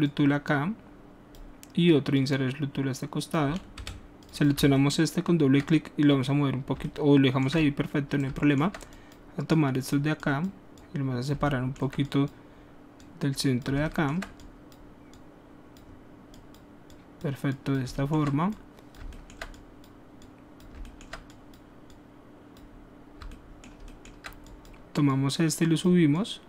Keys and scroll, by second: 3.8 w.